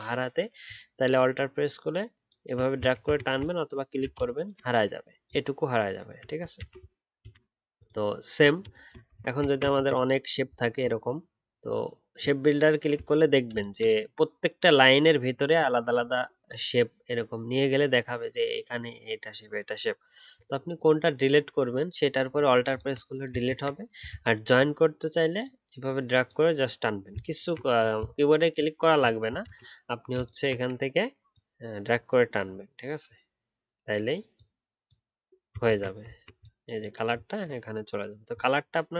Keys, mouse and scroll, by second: 1.1 alt+click, 3.0 ctrl+z, 3.6 alt+click, 5.2 alt+click, 6.5 alt+click, 7.7 ctrl+z, 9.4-9.9 alt+scroll down 1, 9.9 ctrl+click, 10.6-10.9 alt+scroll up 1, 13.0 alt+scroll up 1, 22.7 alt+click, 23.4 ctrl+z, 24.2 alt+scroll up 1, 27.3 ctrl+z, 28.5 shift+click, 35.6 ctrl+z, 36.0 alt+scroll down 2.